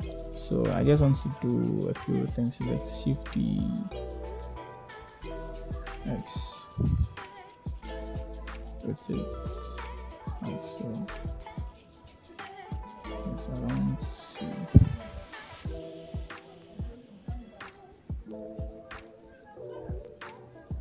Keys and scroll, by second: 0.3 0, 4.1 shift+d, 6.2 c, 6.5 x, 8.7 3, 15.6 0.